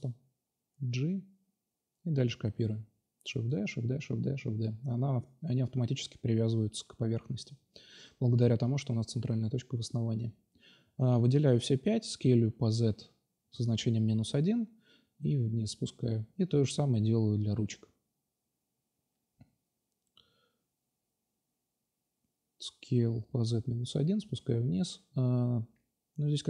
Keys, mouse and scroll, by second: 0.0 g, 0.2-0.6 drag, 1.4 g, 2.6 shift+d, 3.0 shift+d, 3.5 shift+d, 3.9 shift+d, 5.4 click, 7.0-8.3 middle drag, 8.3 shift+d, 8.9 s, 10.0-10.8 drag, 11.0-12.2 right drag, 12.2 shift+d, 13.0 space, 14.4 g, 15.3 shift+d, 16.0 shift+d, 16.7 shift+d, 17.5-20.7 drag, 20.0 shift+d, 20.7 s, 21.8-22.6 drag, 22.7-23.1 middle drag, 24.1-25.2 right drag, 25.5 Delete.